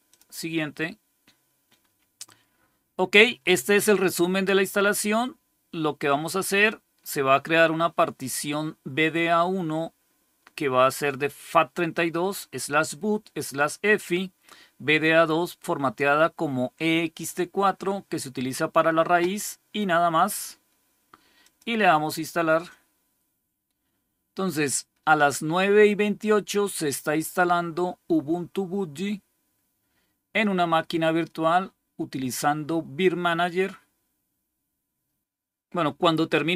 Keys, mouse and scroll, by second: 0.0 click, 21.3 click.